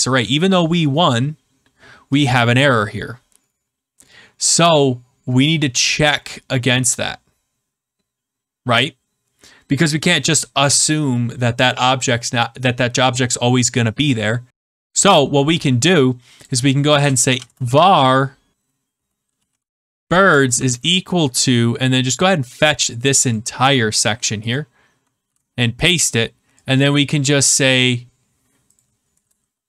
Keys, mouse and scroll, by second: 2.2 click, 16.4 click, 16.9 Return, 17.0-20.4 typing, 23.2 click, 24.0 ctrl+x, 24.5 click, 27.5 click, 28.7 click, 29.1 Return.